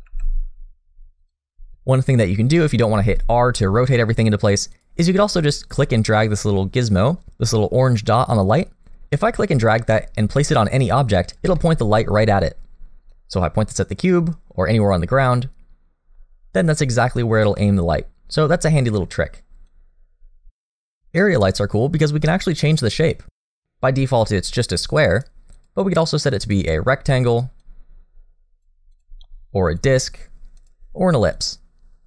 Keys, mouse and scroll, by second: 0.0 r, 2.9 r, 8.4 click, 11.6 middle click, 13.1 click, 17.6 middle click, 19.6 click, 21.2 middle click, 21.7 shift+middle click, 22.1 scroll up 1, 22.3 middle click, 24.1 click, 25.5 click, 27.6 click, 30.6 click.